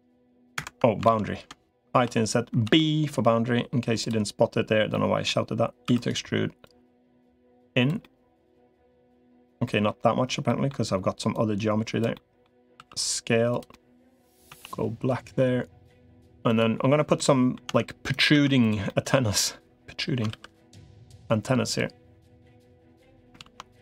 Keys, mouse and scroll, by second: 1.0 ctrl+z, 1.8 i, 3.8 i, 4.7 middle click, 5.8 e, 6.6-7.8 drag, 7.8-9.2 middle drag, 9.4 middle click, 10.3 middle click, 11.2 click, 11.9 middle click, 12.6 s, 13.5 middle click, 14.4 a, 14.6 g, 17.0 middle click, 17.6 Tab, 18.2 Tab, 18.4 click, 18.7 middle click, 20.2 ctrl+r.